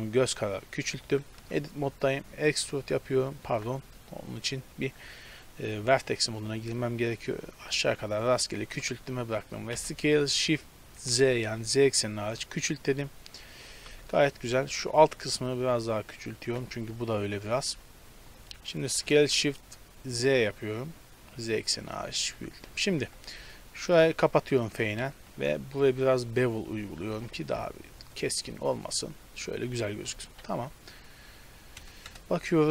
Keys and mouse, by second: 1.5 Tab, 2.6 e, 3.3 click, 3.6 ctrl+z, 6.1 click, 6.3 e, 8.7 Tab, 9.8 s, 13.9 Tab, 15.1 s, 17.7 Tab, 19.0 s, 21.9 Tab, 23.0 KP_Decimal, 24.0 f, 25.3 ctrl+b, 27.3 Tab, 29.0-31.5 middle drag, 32.1 KP_0.